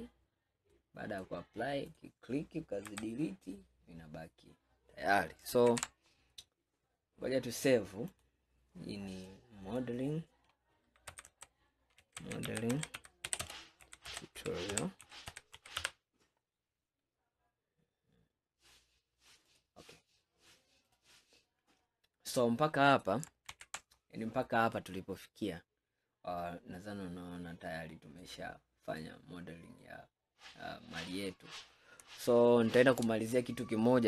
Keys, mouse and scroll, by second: 0.8-2.0 middle drag, 2.0 click, 2.9 Delete, 3.5-5.8 middle drag, 5.8 ctrl+s, 21.9-22.4 scroll down 5, 22.4-23.6 middle drag, 23.6 ctrl+s, 24.0-24.8 scroll down 1, 24.8-27.9 middle drag, 28.3-29.0 scroll down 4, 29.0-30.1 middle drag, 30.1 scroll up 4, 30.8 scroll down 2, 31.5-32.3 scroll down 1, 32.3-33.6 shift+middle drag, 33.6-34.0 scroll up 2.